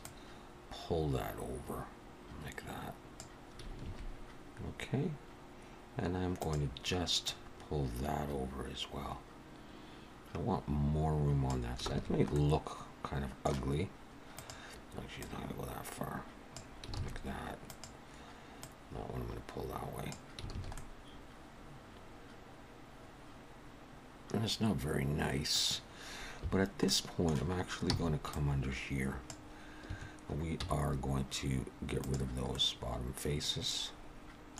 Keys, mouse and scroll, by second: 0.0 click, 3.8 alt+a, 6.4 click, 7.3 click, 11.9 alt+a, 12.3 middle click, 14.3 click, 15.2 click, 17.0 alt+a, 17.7 click, 18.6 click, 20.5 alt+a, 20.8 middle click, 26.8 middle click, 26.8 3, 27.9 c, 30.6 x, 32.5 middle click.